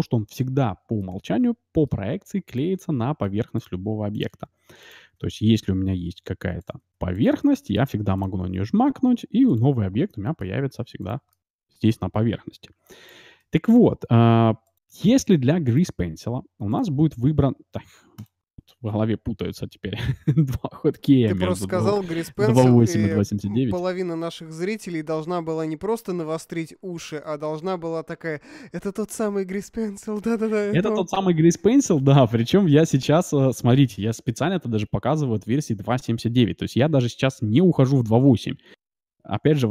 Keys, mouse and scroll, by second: 0.2-2.0 drag, 1.0-5.1 middle drag, 2.4-6.6 drag, 5.1 shift+a, 6.8 s, 7.5-9.4 middle drag, 8.1-10.1 drag, 8.5 shift+a, 10.5 s, 10.9-13.3 middle drag, 12.7 b, 13.4 x, 14.6-17.1 right drag, 15.1 x, 15.7-18.4 drag, 15.9 x, 17.1 x, 18.2-20.0 right drag, 21.4 x, 23.0-26.2 middle drag, 27.6-30.5 middle drag.